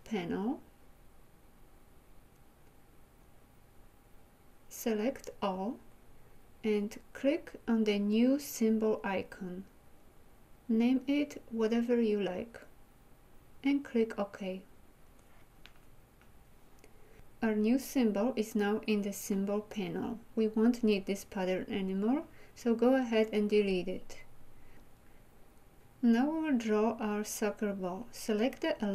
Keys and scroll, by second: 23.4 Delete.